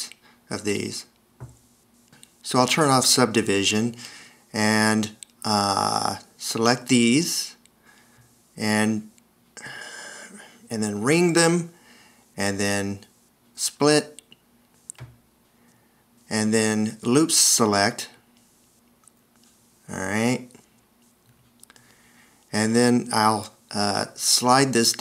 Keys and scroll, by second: 2.7 v, 3.9 s, 6.0 alt+r, 13.9 shift+x, 17.9 t, 18.8 0.